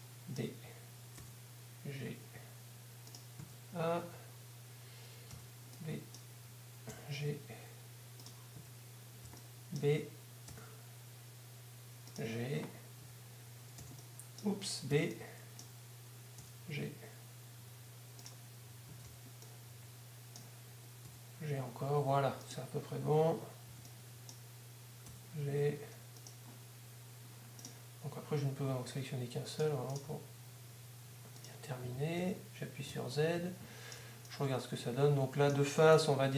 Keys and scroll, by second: 1.2 g, 4.0 a, 6.0 b, 6.9 g, 8.0 g, 9.7-10.5 typing, 12.0 g, 14.0 a, 16.4 g, 20.0 Tab, 21.1 g, 22.0 g, 24.0 Tab, 25.1 g, 26.0 g, 28.7 g, 30.0 g, 32.0 g, 34.0 z, 34.0 Tab.